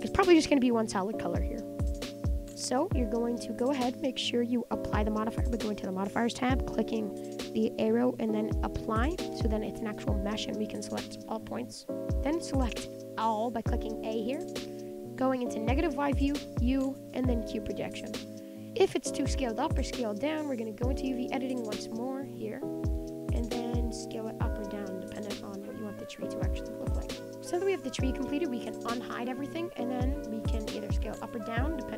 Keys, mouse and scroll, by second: 1.3 scroll up 1, 1.4-2.0 scroll down 4, 2.0-2.8 middle drag, 2.8 Tab, 3.7 Tab, 8.9 click, 9.2 Tab, 9.5 middle click, 10.0 scroll up 6, 10.2 shift+middle click, 10.6 click, 11.0 click, 11.1 g, 11.8 ctrl+z, 11.9 middle click, 12.9 a, 13.2-15.6 middle drag, 15.6 KP_1, 17.4 u, 17.6 Tab, 17.7-19.4 middle drag, 19.4 Tab, 20.9 click, 22.0 middle click, 22.7 middle click, 23.4-24.9 middle drag, 27.3 middle click, 27.7-28.1 scroll up 10, 28.2 middle click, 28.6 scroll up 1, 28.7-30.5 middle drag, 30.5 click, 31.1 s.